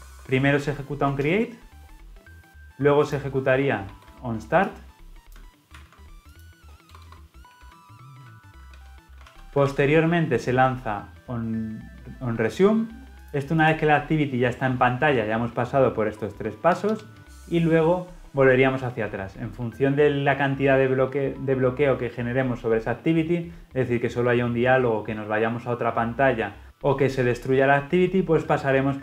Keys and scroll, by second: 4.1 ctrl+v, 5.6 ctrl+x, 9.5 ctrl+v.